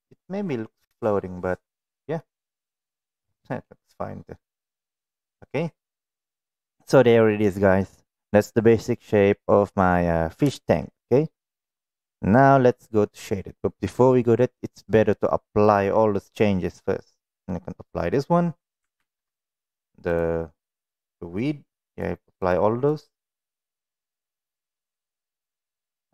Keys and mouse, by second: 2.0-3.1 middle drag, 3.4 middle click, 5.8-6.1 middle drag, 6.5-9.7 middle drag, 10.4 shift+middle click, 10.8-11.3 middle drag, 12.4-12.9 middle drag, 14.2 middle click, 19.0 ctrl+a, 20.0 click, 21.0 middle click, 21.8 click, 22.4 click, 22.8 click, 23.7 click, 25.0 click, 25.9 click.